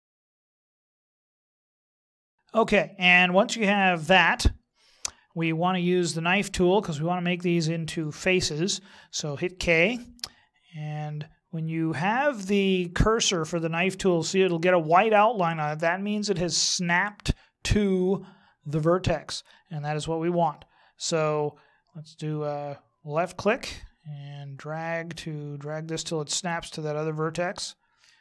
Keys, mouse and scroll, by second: 0.0 shift+right click, 0.2 w, 0.6 click, 2.2 a, 9.6 k.